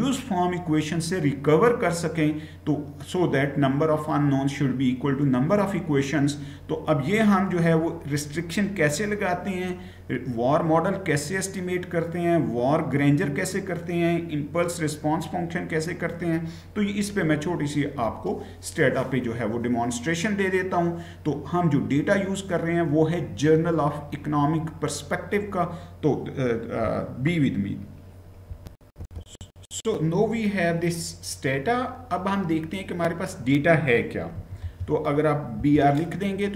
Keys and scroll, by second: 28.8 shift+F9, 34.1 typing, 35.3 Return.